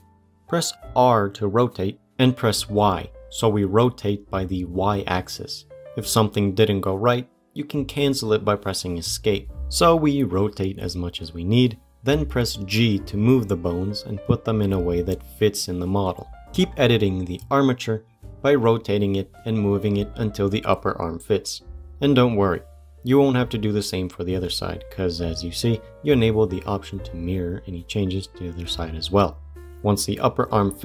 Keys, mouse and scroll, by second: 0.1 click, 0.3 r, 12.6 g, 15.6 scroll up 3, 16.5 g, 29.6 c.